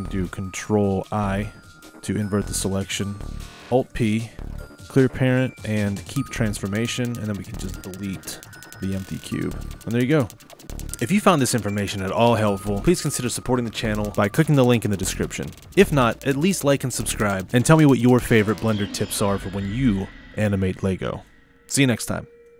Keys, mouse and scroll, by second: 1.4 ctrl+i, 3.9 alt+p, 7.1 click, 8.5 x, 10.3-12.7 middle drag, 12.7 drag.